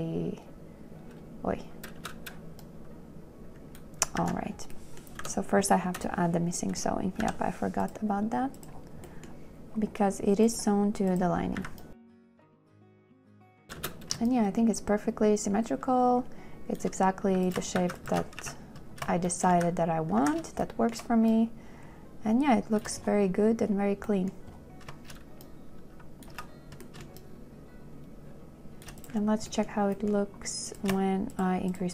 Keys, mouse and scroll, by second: 2.3 space, 4.5 ctrl+z, 5.5 n, 7.5 m, 11.9 a, 12.0 space, 12.6 2, 14.1 space, 14.6 shift+click, 17.6 q, 17.9 shift+click, 18.1 shift+q, 18.3 click, 18.7 2, 19.8 a, 22.4 a, 22.8 shift+click, 26.8 2, 27.3 shift+click, 31.6 shift+click.